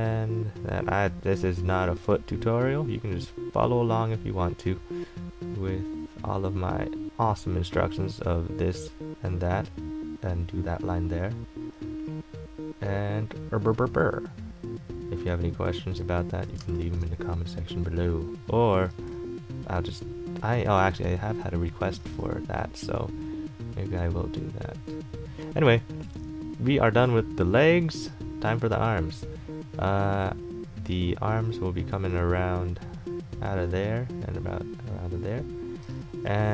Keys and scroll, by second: 16.7 space, 19.0 ctrl+z, 36.4 e.